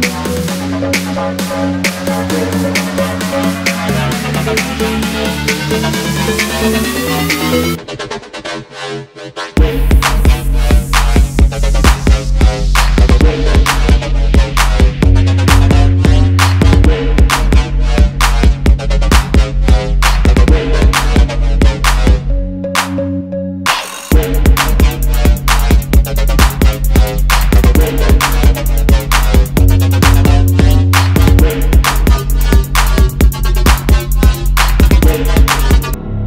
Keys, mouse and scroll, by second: 0.0 ctrl+8, 0.5 double click, 0.9 ctrl+z, 1.3 x, 4.7 double click, 6.5 alt+scroll down 1, 7.1 alt+scroll down 1, 7.5 space, 11.1 alt+scroll down 1, 11.5 alt+scroll up 1, 12.7 shift+click, 14.0 alt+scroll down 1, 14.4 space, 15.0-15.4 alt+scroll up 1, 16.6 alt+scroll up 1, 18.7 alt+scroll down 1, 19.4 alt+scroll down 1, 19.8 space, 22.5 ctrl+g, 23.8-24.4 typing, 24.0 Return, 24.1 Return, 26.8 shift+click, 27.4 ctrl+g, 27.8 shift+click, 29.4 space, 29.4 double click, 29.9 shift+click, 30.7 double click, 31.0 alt+scroll down 1, 31.6 space, 31.8 alt+scroll down 1, 33.1-33.7 alt+scroll up 2, 34.1 shift+click, 35.2 alt+scroll down 1, 35.8 space, 36.1 alt+scroll down 1.